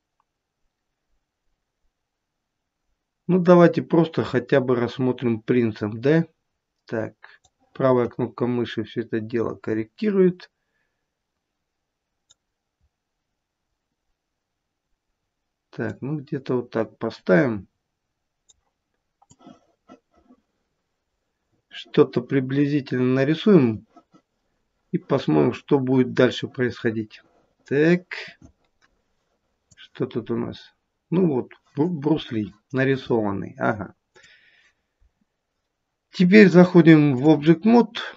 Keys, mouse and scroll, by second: 2.6-3.2 scroll down 1, 3.2-3.8 scroll down 1, 3.8-4.4 scroll down 2, 4.4-7.4 scroll down 1, 7.4 right click, 12.8-15.2 scroll up 1, 15.2-15.8 scroll down 1, 15.8 right click, 19.4 click, 34.2 click, 36.4 click.